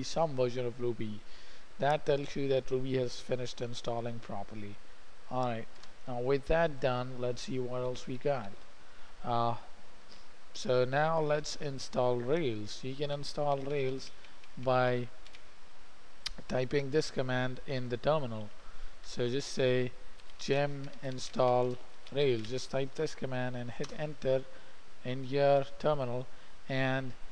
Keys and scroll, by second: 6.3 alt+Tab, 8.3 j, 8.5 j, 8.9 j, 13.3-16.9 typing, 18.4-19.2 typing, 19.5 alt+Tab, 20.4-23.6 typing, 24.3 Return.